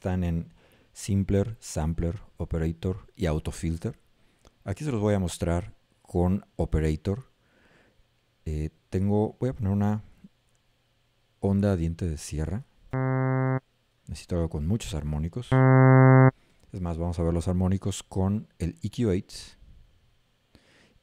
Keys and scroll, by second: 13.0 a, 15.5 a.